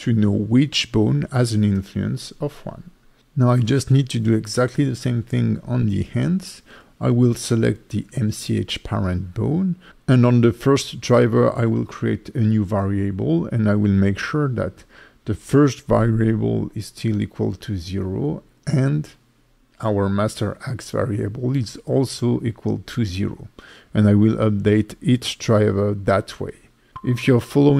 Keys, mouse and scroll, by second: 3.4 right click, 3.8 click, 4.7 right click, 9.2 =, 10.3 right click, 10.6 right click, 10.8 right click, 11.1 right click, 11.4 right click, 11.8 right click, 12.9 right click, 13.8 Left, 14.4 right click, 15.7 right click, 17.0 right click, 17.4 right click, 20.0 middle click, 20.1 shift+middle click, 20.4 middle click, 20.4 scroll up 2, 20.9 right click, 21.4 click, 21.5 right click, 22.0 right click, 23.9 click, 26.0 right click, 26.2 right click, 26.7 right click, 27.0 right click, 27.3 right click, 27.6 right click.